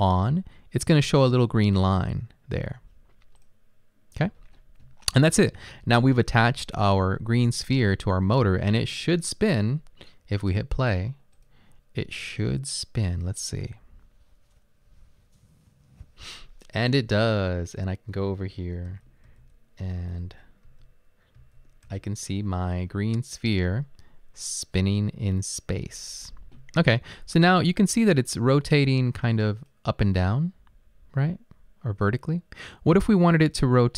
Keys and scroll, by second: 19.3-21.9 typing.